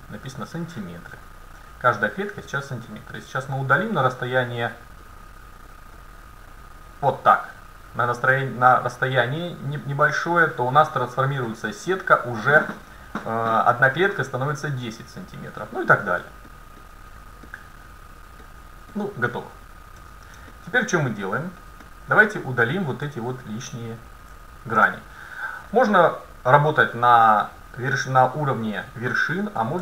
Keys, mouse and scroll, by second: 2.9-5.1 middle drag, 5.1-5.8 scroll up 1, 5.8-9.3 middle drag, 16.3-19.1 middle drag, 20.0 a, 20.6 middle click, 22.7-25.7 right drag, 23.8 middle click, 24.9-26.7 middle drag.